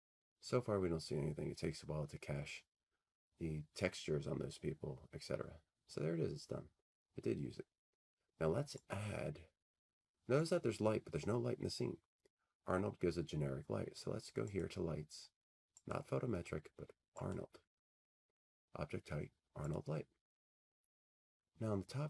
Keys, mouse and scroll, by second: 9.0 click, 10.7 click, 14.7 click, 16.1 click, 17.4 click, 19.8 click.